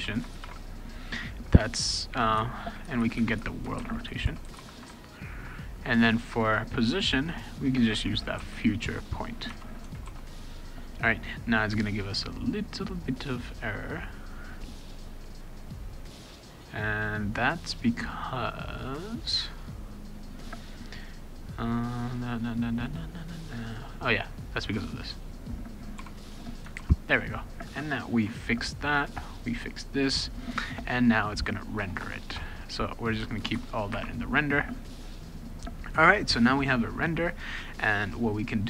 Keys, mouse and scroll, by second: 0.0-0.9 typing, 3.5-5.0 typing, 7.9-8.9 typing, 9.5 Tab, 10.1 ctrl+s, 19.5 click, 24.3 click, 26.0 d, 26.7 ctrl+s, 27.0 click, 31.6 click, 31.8 BackSpace, 32.0 BackSpace, 32.3 BackSpace, 33.0 click, 33.2 Return, 33.4 Return, 33.5 Return.